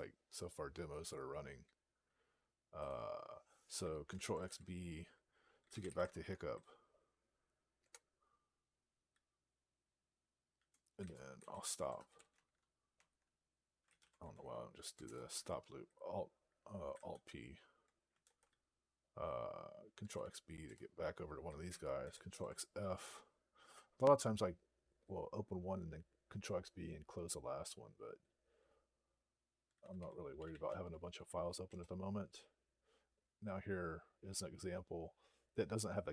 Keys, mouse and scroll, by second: 2.7 click, 5.3-6.2 typing, 7.6 Return, 12.2 Tab, 12.8 Tab, 14.7 alt+p, 14.9 Return, 17.5 alt+p, 20.6 Return, 22.1 ctrl+f, 29.4-30.8 typing, 31.7 Return.